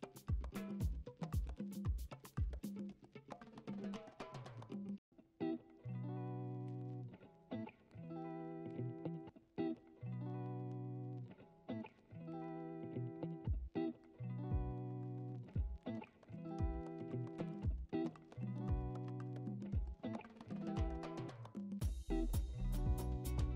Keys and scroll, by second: 0.0-2.7 typing, 2.1 ctrl+d, 3.6 ctrl+d, 3.7 m, 4.4 ctrl+t, 4.8 Return, 5.4 ctrl+d, 5.8 typing, 6.2 ctrl+u, 6.9 Escape, 7.3 ctrl+u, 13.3 ctrl+d, 13.7-16.4 typing, 14.3 ctrl+d, 14.8 ctrl+d, 17.6 x, 20.2 ctrl+z.